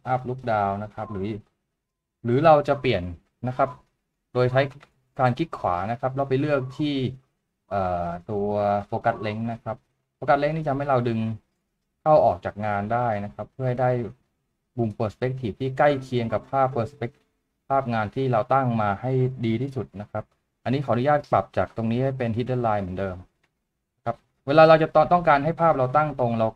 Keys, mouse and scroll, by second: 5.5 right click.